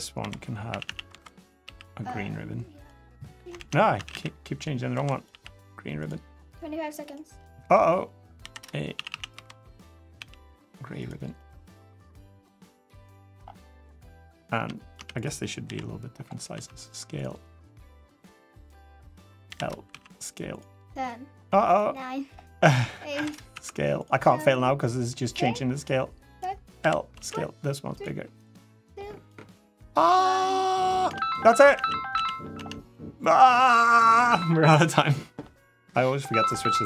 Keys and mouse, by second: 0.2-1.4 typing, 3.3 ctrl+z, 3.7 a, 3.9 a, 4.7 b, 5.1 g, 6.1 click, 6.8 click, 7.6 click, 8.7 a, 8.9 a, 9.1 b, 9.9 g, 11.1 click, 12.6-13.1 middle drag, 13.7 middle click, 14.3 Tab, 14.7 Tab, 14.9 click, 15.4 l, 16.3 s, 17.7 click, 18.8 click, 19.2 l, 19.6 s, 20.8 click, 21.7 middle click, 22.4 click, 22.9 l, 23.3 s, 24.3 click, 25.3 middle click, 26.6 l, 26.9 s, 28.3 click, 29.7 click, 30.7 click, 31.5 a, 31.9 a, 32.3 Tab, 32.7-33.0 middle drag, 33.9 middle drag.